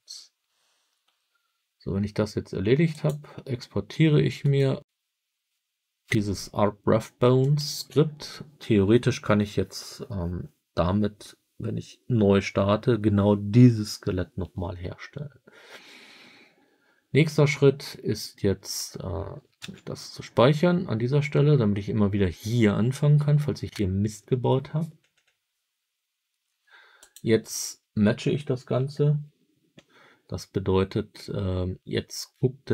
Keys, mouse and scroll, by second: 2.8 click, 22.5 ctrl+s, 26.9-29.9 drag.